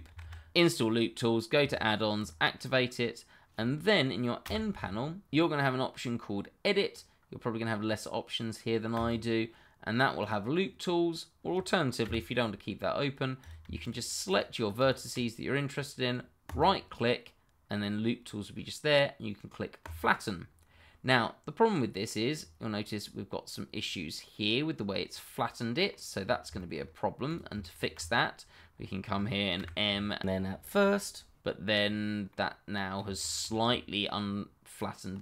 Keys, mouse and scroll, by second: 2.1 click, 4.4 double click, 8.9 click, 12.0 n, 13.4 click, 13.8 shift+click, 16.4 right click, 19.8 click, 21.1 middle click, 22.3-23.8 scroll up 1, 23.8 scroll down 1, 24.4 middle click, 26.2-26.5 scroll up 1, 26.5 shift+middle click, 27.2 click, 27.7 shift+click, 27.8 click, 28.7-29.5 scroll up 1, 29.5 m, 30.8 click, 31.5-32.0 scroll down 1, 32.4 middle click, 33.3 shift+middle click, 33.6-35.2 scroll down 1.